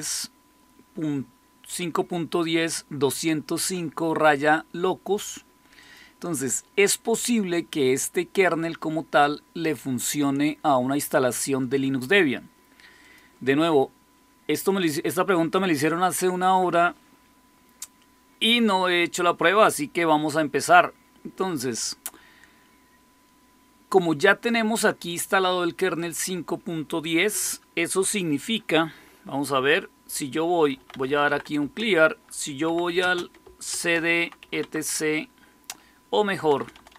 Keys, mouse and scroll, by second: 5.7 click, 7.5-9.1 drag, 12.9 click, 16.3 click, 23.9-30.6 drag, 30.4-34.3 typing, 34.5 Tab, 36.3-36.9 typing.